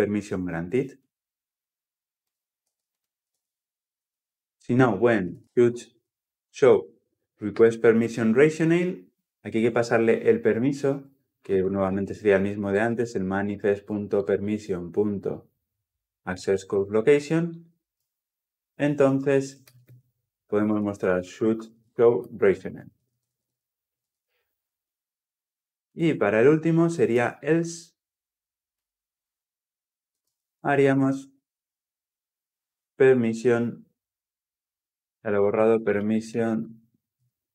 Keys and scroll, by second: 2.5 ctrl+c, 3.1 ctrl+v, 7.4 Tab, 9.3 ctrl+p, 12.6 Return.